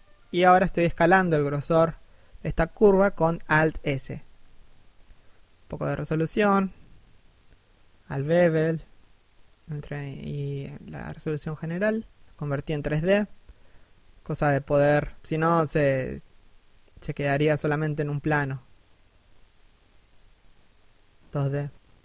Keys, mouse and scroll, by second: 0.5 right click, 0.9 g, 1.1 right click, 1.3 alt+s, 2.8 right click, 6.4 shift+t, 12.0 right click, 12.1 g, 13.1 right click, 13.2 r, 16.2 right click, 17.0 KP_7, 17.5 r, 18.3 right click, 19.3 g, 19.8 right click, 20.0 g, 21.0 right click, 21.0 alt+s.